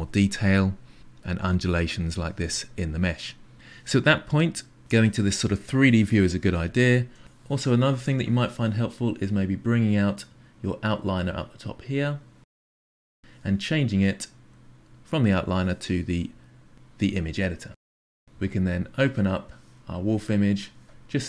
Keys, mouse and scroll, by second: 10.9 click, 12.9-21.2 drag.